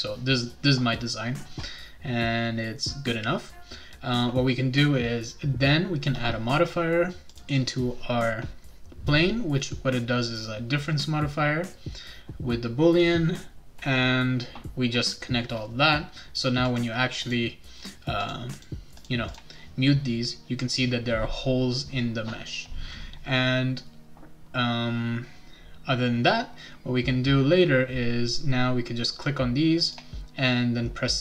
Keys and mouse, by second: 7.3 click, 16.7 click, 17.2 click, 18.2 click, 18.5 click, 19.0 click, 19.3 click, 29.8 click.